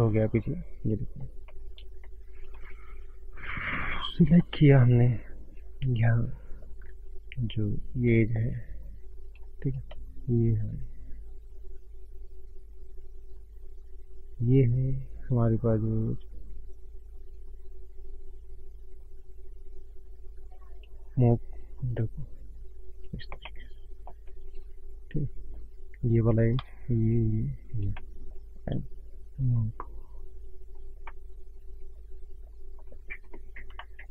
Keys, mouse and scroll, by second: 0.4 middle click, 0.4-1.1 scroll up 1, 1.3 scroll up 1, 1.8 middle click, 1.8 scroll up 3, 1.9 middle click, 2.4 shift+middle click, 2.8-3.2 scroll down 3, 3.2 middle click, 3.5-3.9 scroll up 4, 3.8 middle click, 4.3 scroll up 1, 5.8 middle click, 7.8 shift+click, 8.6 shift+click, 9.2 shift+click, 9.3 middle click, 9.3 scroll up 1, 10.2 shift+click, 15.1 shift+click, 16.5-20.4 shift+click, 21.5 click, 23.3 scroll down 1, 23.5 middle click, 24.2 middle click, 25.1 middle click, 25.1 scroll down 1, 25.2 middle click, 25.2 scroll up 1, 26.5 click, 26.7 shift+click, 27.2 click, 27.9 middle click, 28.7 click, 30.6 scroll down 5, 31.1 middle click, 32.2 middle click, 32.2 scroll up 2, 33.2-33.6 scroll up 2, 33.8 shift+middle click.